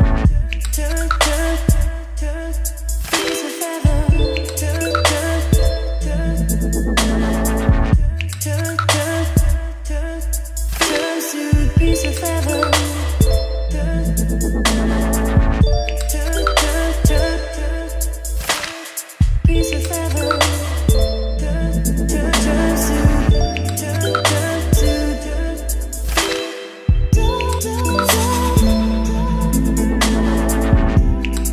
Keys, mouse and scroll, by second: 2.0-10.0 middle drag, 10.0 click, 10.3 ctrl+z, 11.3-17.5 drag, 17.5 Return, 17.5-20.5 typing, 18.8 Return, 21.7-23.8 typing, 22.2 Return, 25.7-28.5 typing, 26.9 Return, 28.6 Return, 30.5-31.5 typing.